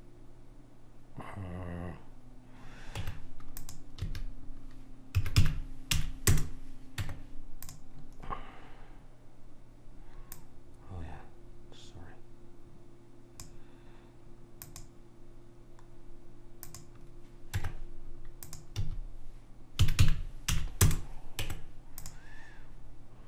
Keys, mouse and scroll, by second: 3.2 Tab, 4.1 a, 5.3 s, 7.2 Tab, 8.4 click, 10.4 click, 14.8 click, 17.7 Tab, 18.9 a, 20.0 s, 21.5 Tab.